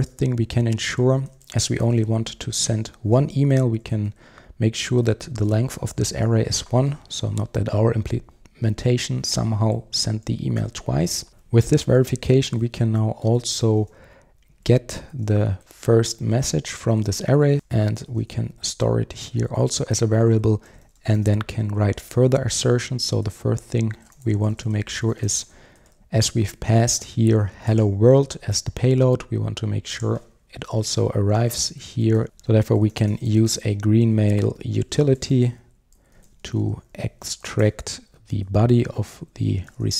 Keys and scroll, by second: 11.3 super+z, 15.3 Return, 18.4 Return, 32.2 super+z, 36.2 Return.